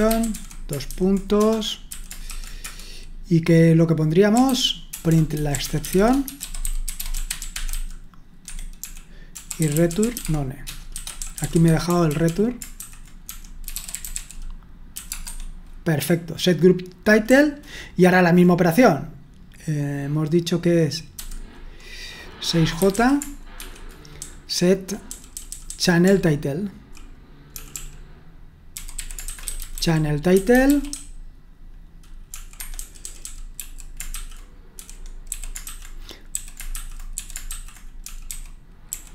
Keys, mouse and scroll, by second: 0.0-2.7 typing, 4.1-18.3 typing, 8.5 Escape, 22.8-26.8 typing, 28.5-39.1 typing.